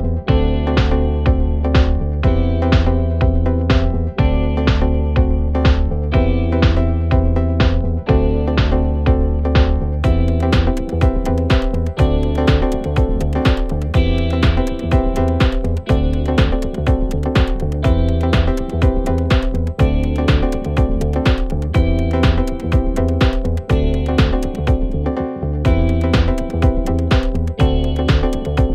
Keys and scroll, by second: 6.0 ctrl+z, 6.4 Escape, 6.9 ctrl+z, 7.9 3, 10.4 4, 11.2 F1, 20.8 Delete, 23.1 ctrl+z.